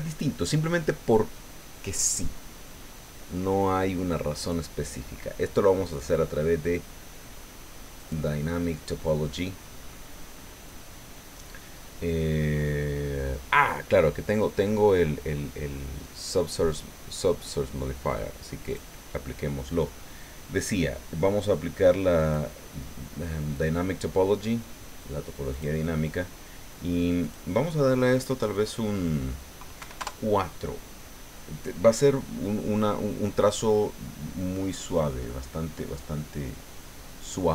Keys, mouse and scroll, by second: 3.8 middle click, 5.4-5.9 scroll down 1, 8.0 click, 18.6 click, 22.2 click, 25.5 click, 27.2 click, 29.8 KP_4, 30.0 KP_Enter, 36.2 click, 36.7 click.